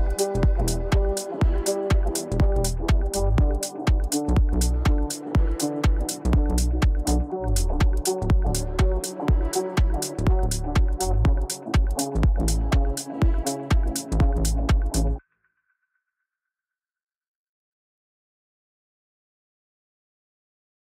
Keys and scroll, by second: 0.2 Delete, 9.0 Delete.